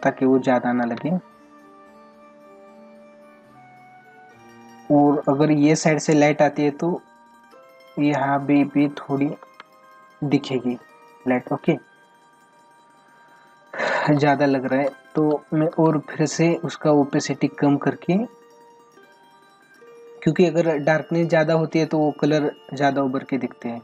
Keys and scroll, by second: 9.4 ctrl+alt+z, 13.7 ctrl+alt+z.